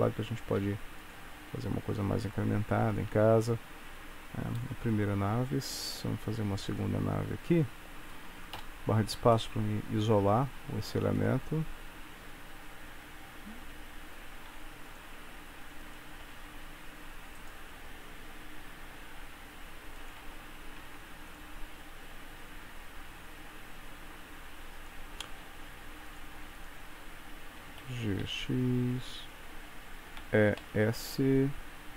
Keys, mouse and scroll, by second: 0.7 e, 1.5 s, 3.2 Tab, 4.9 KP_1, 6.0 shift+d, 7.2-7.9 scroll down 2, 7.9-8.3 scroll down 1, 9.5 middle click, 10.6 Tab, 11.2 click, 14.6 e, 15.3 s, 16.3 g, 19.2 e, 20.3 Tab, 20.9 Tab, 21.4 click, 22.4 r, 26.2 click, 26.7 shift+click, 27.8 g, 30.3 e.